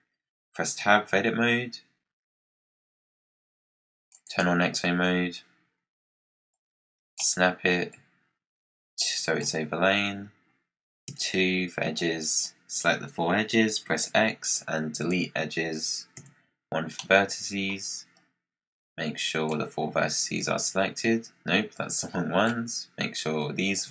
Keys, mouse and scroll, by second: 0.0 scroll down 3, 4.0-6.5 drag, 7.8 click, 11.0 2, 11.9 click, 13.7 x, 16.1 1, 16.9-18.1 middle drag, 18.1 click, 21.6 click, 23.3 shift+click.